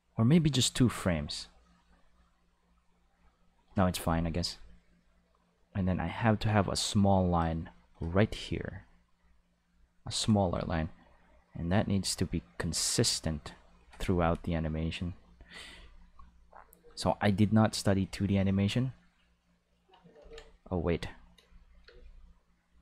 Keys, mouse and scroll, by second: 7.2 click, 9.6 click, 11.1 click, 12.8 click, 14.8 click, 16.3 click, 18.3 click, 20.1 ctrl+z, 20.8-21.2 drag, 21.3 space, 21.8 space, 21.9-22.7 drag.